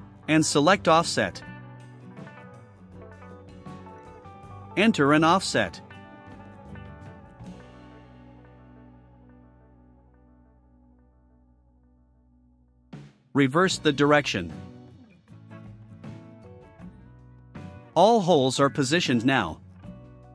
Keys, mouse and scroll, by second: 0.1 click, 2.1 click, 4.3 click, 5.5-6.6 typing, 7.8 3, 8.1 1, 9.0 6, 10.0 click, 14.6 click, 18.4-20.2 drag.